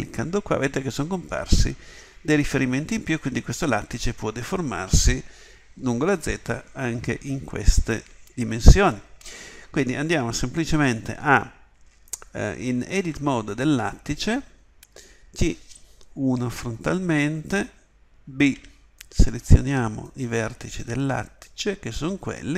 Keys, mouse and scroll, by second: 13.0 Tab, 16.2 KP_1, 18.6 b.